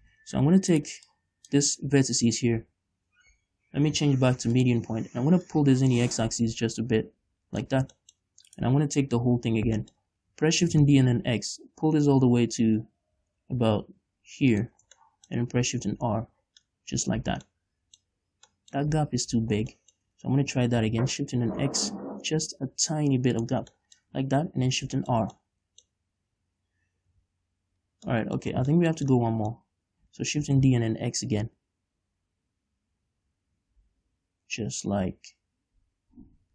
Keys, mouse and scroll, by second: 0.1 shift+middle click, 0.4 ctrl+z, 1.2 right click, 1.5-2.9 drag, 2.9 scroll down 1, 3.7 scroll up 1, 4.4 ., 5.3 scroll up 1, 5.9 click, 8.3 scroll down 1, 8.4 shift+middle click, 9.0 right click, 10.5-15.3 middle drag, 10.5-11.1 scroll up 2, 11.1 shift+d, 15.1 shift+click, 15.3 scroll down 1, 16.4 shift+b, 17.1 middle click, 17.6 z, 18.0 middle click, 19.4 ctrl+z, 19.4-23.9 middle drag, 20.2 scroll up 2, 21.2 shift+d, 23.9 shift+click, 24.2-28.8 shift+middle drag, 24.9 shift+r, 25.2 scroll down 2, 25.7 Tab, 27.6 KP_5, 28.8 click, 28.8 right click, 28.9 Tab, 29.3-36.5 middle drag, 30.9 shift+d.